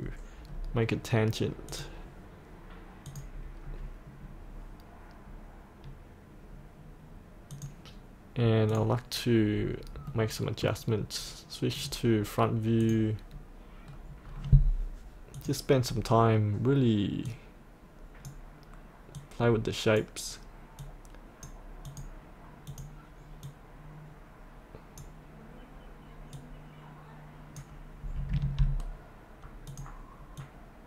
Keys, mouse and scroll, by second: 0.5-1.7 scroll down 1, 1.7 click, 3.6-7.5 scroll up 1, 7.5 click, 9.6-10.1 scroll up 1, 10.1 middle click, 10.7-11.8 scroll up 1, 11.8 click, 13.9-15.4 scroll down 1, 15.4-28.3 drag, 28.5 ctrl+z, 29.7-30.8 drag.